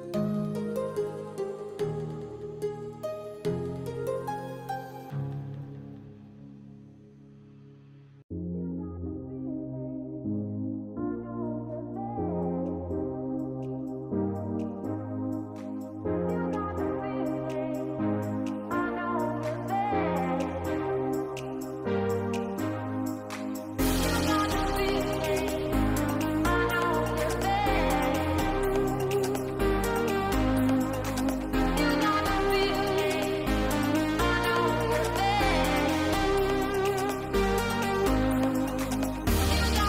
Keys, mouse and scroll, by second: 2.2 middle click, 4.1 KP_0, 6.1 ctrl+s, 10.8 click, 18.9 shift+middle click, 19.2 middle click, 20.6 shift+middle click, 20.9 middle click, 21.3 shift+middle click, 21.9 shift+middle click, 22.1 middle click, 22.6 shift+middle click, 23.4 middle click, 23.9 shift+middle click, 25.0-26.7 drag, 27.0 middle click, 28.3 h, 29.1 click, 29.5 middle click, 30.3 h, 30.6 shift+middle click, 31.7 click, 32.5 h, 35.6 click, 36.8 click, 37.7 click, 39.3 click.